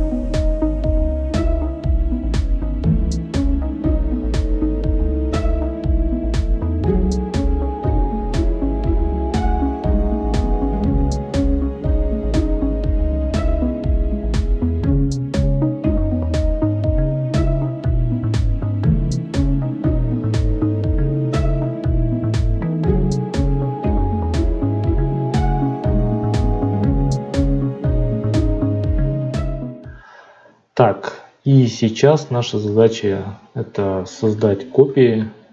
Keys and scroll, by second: 29.5 F9.